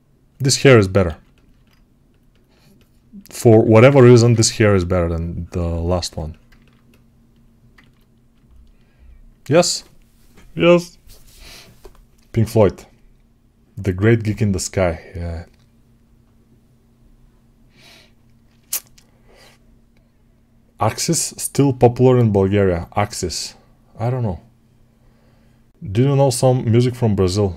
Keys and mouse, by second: 0.9 alt+q, 3.7-7.6 drag, 3.9 1, 7.6 ctrl+alt+right click, 8.1-27.5 alt+shift+drag.